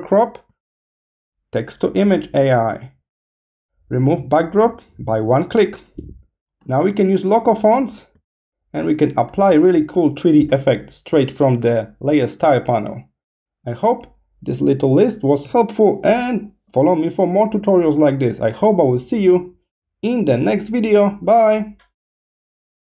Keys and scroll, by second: 0.4 space, 4.2 space, 5.8 space, 8.1 space.